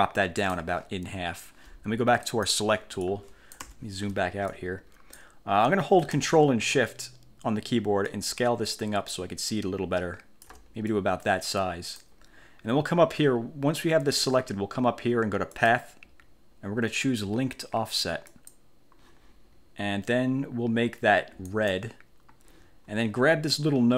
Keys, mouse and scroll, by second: 2.4 click, 3.1 click, 3.7 1, 4.6 click, 8.2-10.8 ctrl+shift+drag, 11.0-12.3 ctrl+shift+drag, 15.7 click, 18.4 click, 21.6 click.